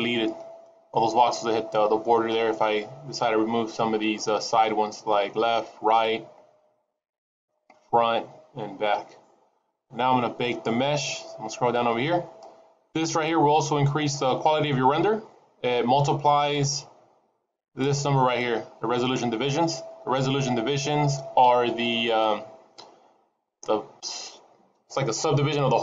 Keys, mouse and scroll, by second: 0.3 middle click, 9.6-11.0 scroll down 1, 11.0-13.3 scroll down 5, 15.9-18.4 scroll up 12.